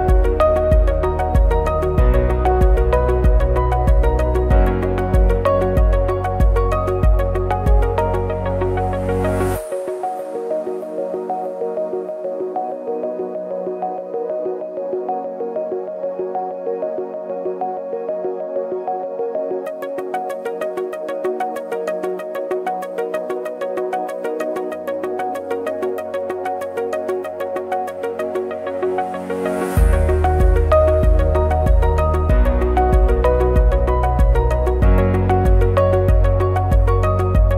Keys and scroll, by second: 1.7 ctrl+c, 5.3 ctrl+shift+a, 8.8 ctrl+shift+a, 9.9 ctrl+-, 13.5 ctrl+g, 17.0 ctrl+shift+a, 17.7 ctrl+=, 21.1 ctrl+f, 21.8 ctrl+c, 21.9 ctrl+f, 22.8 ctrl+f, 23.4 ctrl+c, 23.5 ctrl+f, 25.1 ctrl+f, 26.0 ctrl+c, 26.1 ctrl+e, 33.3 ctrl+shift+a, 34.9 ctrl+-, 35.4 ctrl+=.